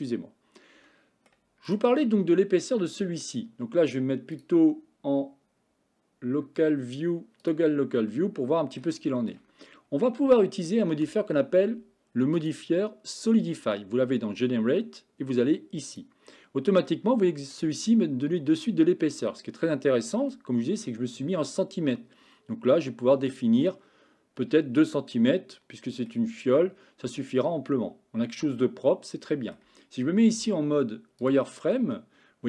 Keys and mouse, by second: 0.9 middle click, 2.7 middle click, 4.4-7.6 drag, 8.1-8.9 middle drag, 9.1 shift+middle click, 10.3-10.7 shift+middle drag, 12.6-16.1 drag, 16.9 middle click, 23.4 click, 25.2-26.1 middle drag, 27.2-29.6 middle drag, 30.4 z, 32.0-32.4 middle drag.